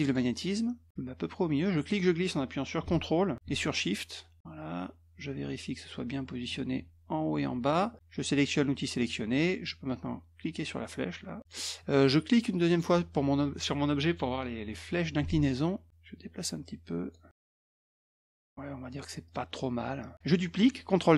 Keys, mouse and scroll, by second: 0.0 click, 1.6-6.4 drag, 9.0 click, 10.6 click, 12.7 click, 15.9-17.1 drag, 18.1 click, 19.2 click, 19.8 click.